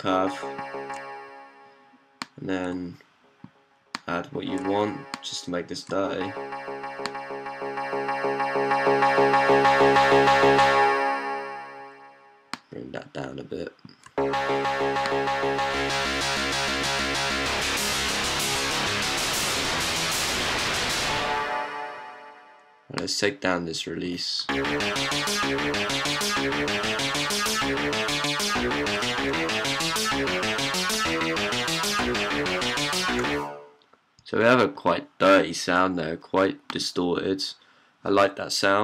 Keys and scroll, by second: 0.0-0.7 typing, 2.6-4.4 typing, 5.7 typing, 14.1-20.9 typing, 24.3-32.1 typing, 33.6-34.5 typing.